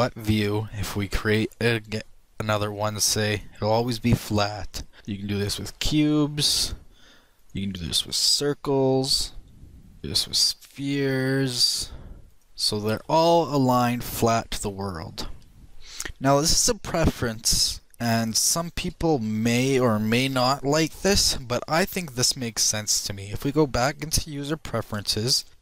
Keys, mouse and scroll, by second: 3.1 shift+a, 5.5 shift+click, 6.0 shift+a, 7.0 click, 8.0 shift+click, 8.4 shift+a, 10.0 shift+click, 14.9 shift+middle click, 15.1 shift+middle click, 16.4 middle click, 17.2 shift+middle click, 17.9 t, 18.0 middle click, 19.4 n, 19.8 t.